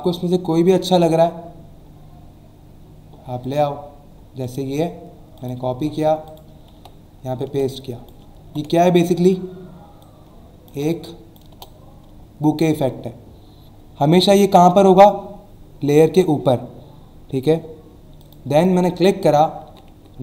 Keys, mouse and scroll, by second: 1.0-1.5 scroll down 2, 2.5 scroll down 1, 3.4 click, 4.4 right click, 5.4 click, 5.7 alt+Tab, 6.2 click, 6.7 ctrl+v, 7.7 click, 8.8 scroll down 1, 10.0 alt+shift+click, 11.5 Return, 12.2 alt+scroll up 1, 18.2 click, 18.5 click.